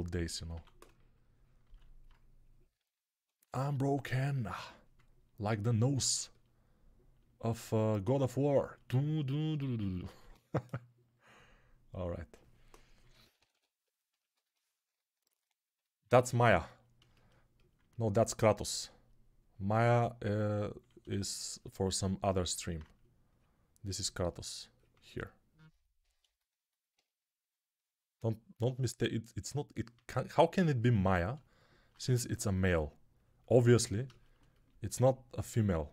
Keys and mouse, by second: 9.9 alt+q, 13.0-14.2 drag, 13.1 [, 13.3 [, 13.4 [, 14.2-22.9 ctrl+alt+right drag, 20.7-22.9 shift+drag, 20.7-22.9 shift+middle drag.